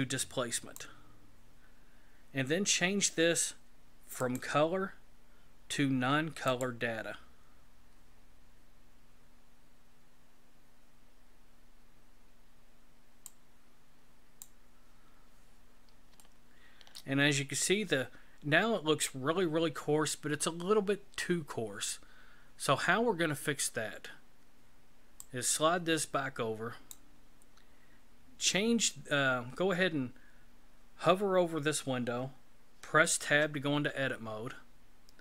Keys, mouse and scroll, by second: 4.2 click, 13.2 click, 15.2-16.1 scroll down 4, 16.2 shift+middle click, 17.5-18.2 scroll up 5, 25.2 click, 33.2 Tab.